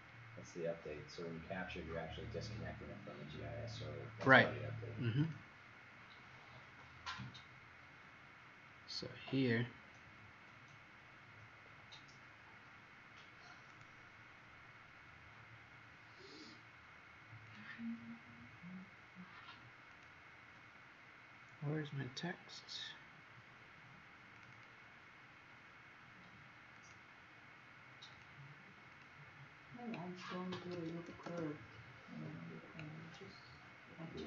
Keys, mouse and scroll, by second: 0.7-1.1 scroll down 1, 1.2-1.7 scroll down 3, 2.4-3.6 scroll down 2, 5.2 click, 8.9 scroll up 4, 9.8-10.2 scroll up 4, 10.9-11.4 scroll up 2, 13.7 click, 24.5 click, 26.8 click, 31.1 typing.